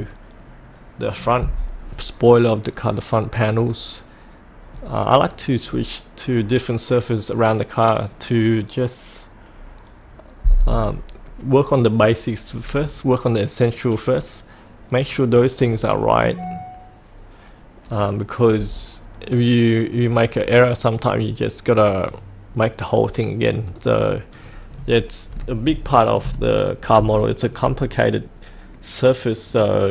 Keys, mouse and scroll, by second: 0.3-4.7 scroll down 1, 4.7-5.6 scroll up 1, 5.6-14.0 scroll down 1, 14.0 click, 15.0-15.9 scroll up 1, 15.9-19.8 scroll down 1, 19.8 click, 20.2 right click, 20.9 click, 23.6 right click, 24.3 click, 24.9-25.6 scroll up 1, 25.9 shift+middle click, 26.5-27.0 scroll down 1, 27.2 shift+middle click, 28.0-29.9 middle drag.